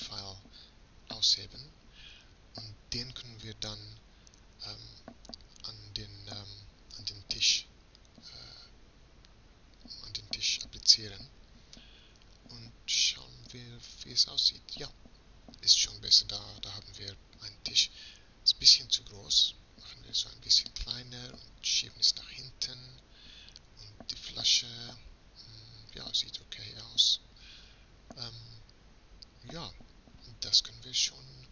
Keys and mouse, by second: 3.4-5.1 right drag, 5.1-9.4 drag, 13.2 shift+z, 17.1 s, 18.7-20.3 middle drag, 20.3 g, 27.3 shift+z.